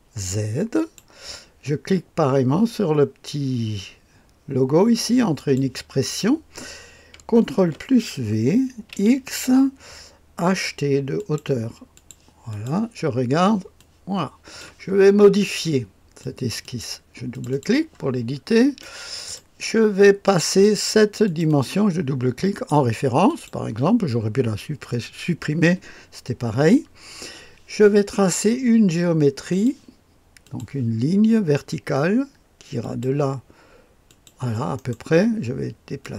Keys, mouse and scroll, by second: 5.3 click, 7.5 ctrl+v, 8.8 x, 11.1 click, 11.9 click, 12.5 click, 13.0-13.8 scroll down 1, 13.8 click, 16.2 click, 16.6 click, 17.5 click, 18.4-19.6 scroll up 1, 18.8 middle click, 21.2 click, 21.4 click, 22.5 click, 23.3 click, 29.5 click, 30.4 click, 32.8 click, 34.0 click, 34.7-36.0 middle drag, 36.0-36.1 drag.